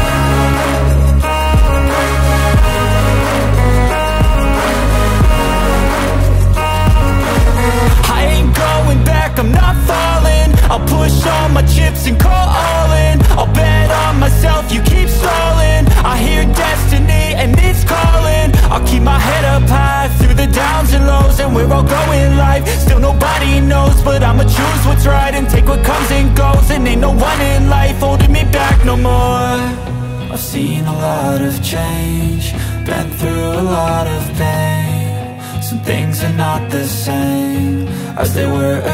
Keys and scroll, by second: 1.3 Return, 1.8 p, 3.4 space, 4.5 l, 6.3 Return, 7.7 space, 8.3 Delete, 8.9 l, 15.7 space, 16.5 e, 18.9 space, 19.5 p, 21.3 Return, 22.3 l, 23.9 Return, 25.8 space, 26.7 p, 28.3 Return, 28.8 space, 30.8 m, 32.3 Return, 33.9 Return, 34.2 space, 35.0 m, 35.9 Up, 36.8 Return, 37.9 2, 38.5 Return.